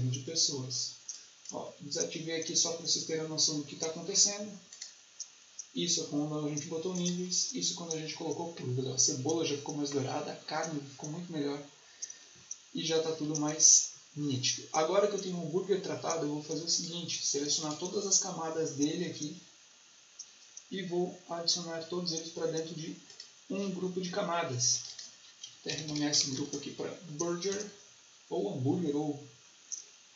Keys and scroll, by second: 25.4-26.7 typing, 27.4 Return.